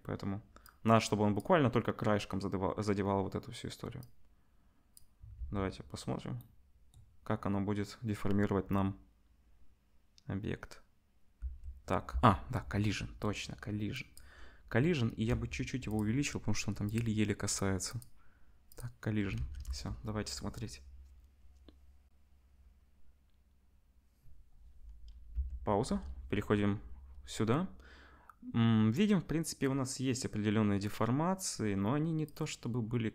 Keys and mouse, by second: 0.8-16.0 drag, 5.4 space, 11.4 space, 12.1 space, 15.2 s, 16.0-16.9 middle drag, 16.9 click, 17.0 middle click, 17.5 click, 17.6 middle click, 17.9 click, 18.0-18.7 middle drag, 18.7-33.1 drag, 19.3 ctrl+s, 19.6 space, 25.3 space, 25.8 KP_0.